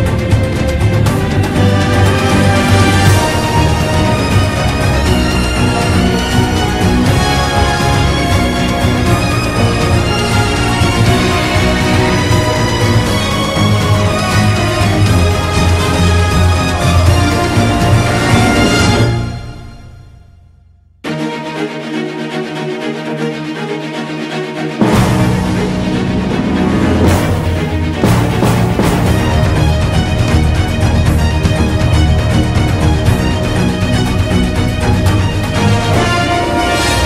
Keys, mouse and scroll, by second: 1.9 b, 1.9 ctrl+-, 4.9 ctrl+=, 5.9 b, 6.0 right click, 10.7 b, 11.0 ctrl+-, 14.4 right click, 16.1 ctrl+=, 17.2 ctrl+z, 19.2 ctrl+z, 19.8 ctrl+z, 23.3 ctrl+z, 25.1 ctrl+-, 25.7 ctrl+=, 26.7 ctrl+-, 26.7 ctrl+=, 30.4 right click, 30.8 ctrl+=, 31.5 ctrl+z, 32.4 ctrl+z, 34.0 ctrl+z, 34.6 ctrl+z, 36.0 ctrl+z, 36.9 ctrl+-.